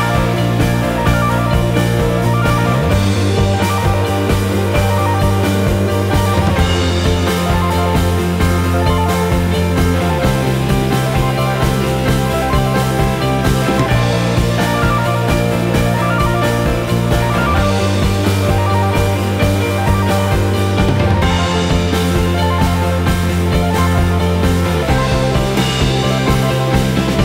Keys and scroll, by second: 4.6 Return.